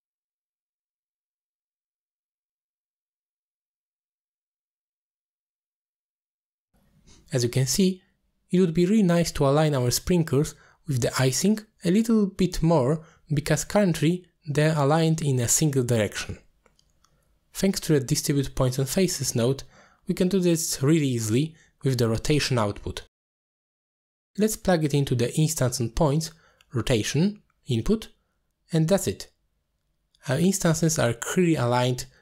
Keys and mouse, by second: 0.0-1.5 drag, 1.7 alt+shift+click, 2.3 middle click, 3.1-4.6 drag, 4.1 r, 4.7 middle click, 5.8-6.5 drag, 7.1 middle click, 8.1-8.8 middle drag, 9.2 middle drag, 10.7 KP_3, 12.4 z, 12.9-13.3 middle drag, 13.6-13.9 middle drag, 14.2 z, 15.4 shift+middle drag, 16.4 shift+middle drag, 16.8 middle click, 18.3 middle click, 19.8 click, 20.1 middle click, 21.4-21.9 drag, 22.4-22.7 drag, 23.4 middle click, 24.8-27.4 drag, 29.5 middle click, 31.5-31.9 ctrl+drag.